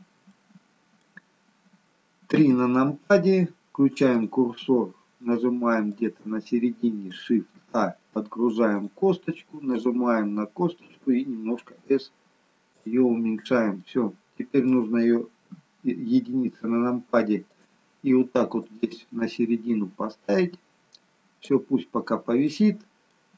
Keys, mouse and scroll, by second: 0.3 middle click, 1.2-2.0 scroll down 1, 2.3 KP_3, 4.2 click, 5.9 click, 7.6 shift+a, 8.8 click, 9.7 click, 11.6 s, 13.8 middle click, 15.4 KP_1, 17.4 click, 18.7 click, 21.9-22.5 scroll up 3, 22.4 middle click.